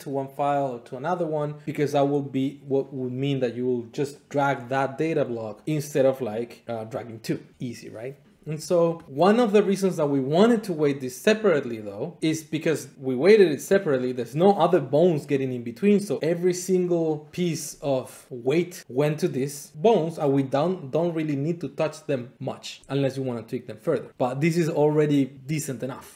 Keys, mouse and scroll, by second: 9.0 Tab, 24.1 click, 24.1 scroll.